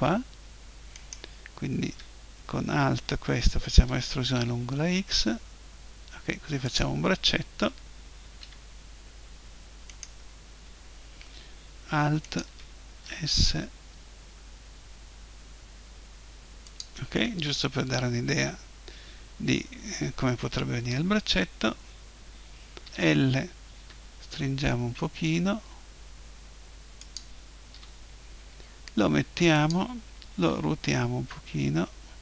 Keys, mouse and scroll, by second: 1.0-3.0 right drag, 3.8 e, 6.8-8.7 drag, 8.4 a, 8.7-9.9 middle drag, 9.9-11.7 right drag, 11.7 middle click, 12.2-14.0 right drag, 13.0 s, 14.0-15.9 middle drag, 16.8-18.8 drag, 22.8 l, 23.8 s, 27.2-29.2 drag, 27.8 g, 29.7-31.7 drag, 30.4 r.